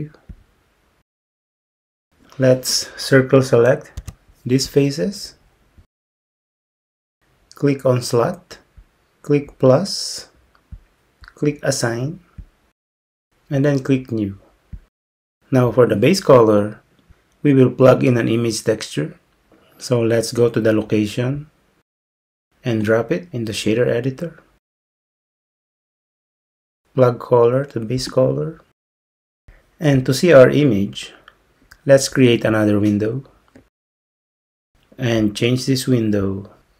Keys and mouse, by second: 4.0 c, 8.9-14.8 drag, 25.9 click, 28.1-29.6 drag, 33.7-34.7 drag, 36.3-36.7 drag.